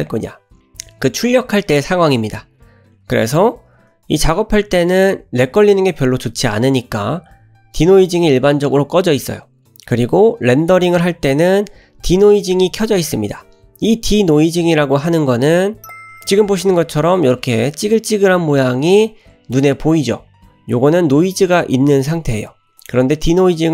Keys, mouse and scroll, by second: 4.2 middle click, 6.0 middle click, 6.8 scroll up 1, 15.8 scroll up 2, 18.3-19.1 middle drag.